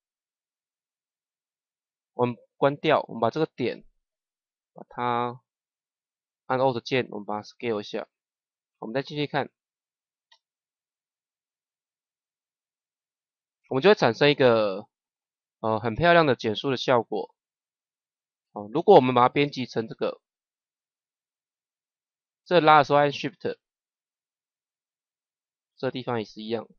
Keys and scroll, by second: 10.2 KP_0.